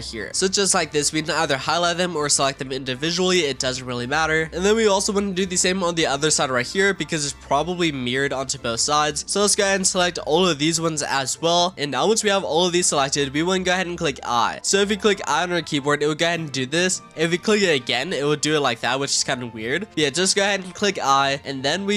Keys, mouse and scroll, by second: 0.3 shift+click, 1.7 shift+click, 2.1 shift+click, 2.5 shift+click, 2.9 shift+click, 3.2 shift+click, 3.5 shift+click, 3.9 shift+click, 4.2 shift+click, 4.5-5.9 middle drag, 5.9 shift+click, 7.0 shift+click, 8.0 shift+click, 8.9 scroll up 2, 9.1 middle click, 9.5 shift+click, 10.8 shift+click, 11.7 shift+click, 11.7-14.6 middle drag, 14.6-15.6 scroll down 1, 15.6 i.